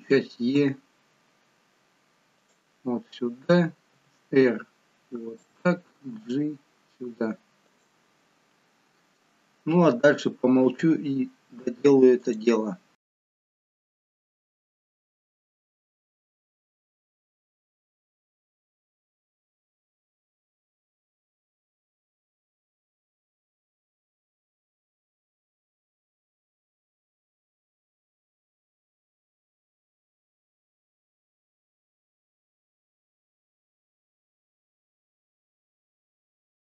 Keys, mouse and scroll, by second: 0.5 e, 3.9 r, 6.0 g, 11.4 e, 13.3 r, 14.8 g, 15.7 click, 16.4 r, 17.2 g, 18.7 click, 19.3 g, 20.5 e, 21.8 r, 23.3 g, 25.0 r, 25.9 g, 27.2 e, 28.4 r, 29.4 g, 31.5 r, 32.5 g, 33.9 e, 35.3 r.